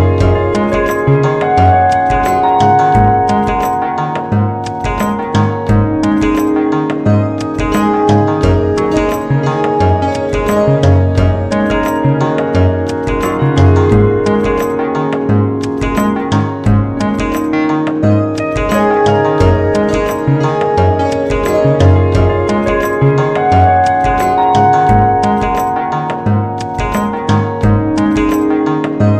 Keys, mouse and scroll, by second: 0.2 g, 7.4 g, 18.7 e, 24.6 e.